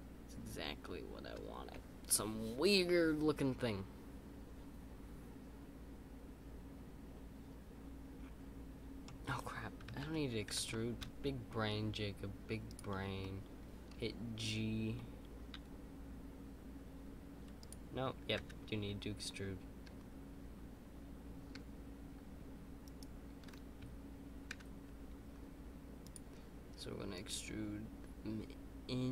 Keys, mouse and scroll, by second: 0.0 right click, 10.7 right click, 10.7 middle click, 13.2-15.5 middle drag.